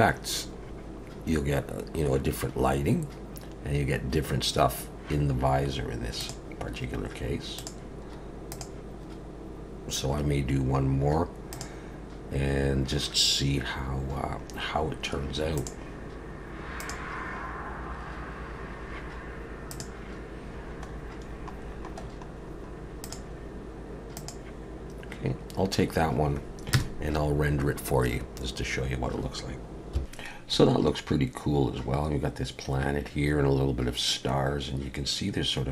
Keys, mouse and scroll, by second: 6.2 click, 11.5 click, 19.7 click, 26.8 KP_0.